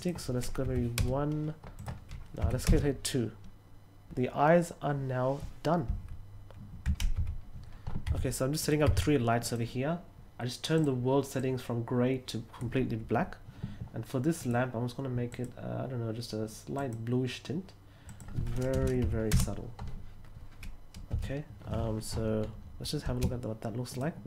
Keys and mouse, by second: 1.7 click, 8.5 click, 8.8 r, 9.4 click, 10.7 click, 11.3-12.5 drag, 14.3 click, 15.2 click, 16.7 click, 18.0 click, 19.2 Return.